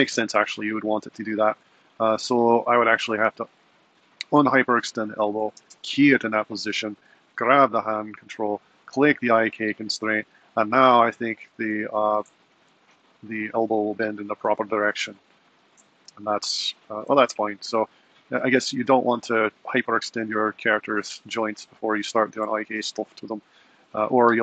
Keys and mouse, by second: 0.2 super+z, 2.7 click, 3.4 alt+r, 5.6 i, 7.4 click, 8.6 click, 13.1 g.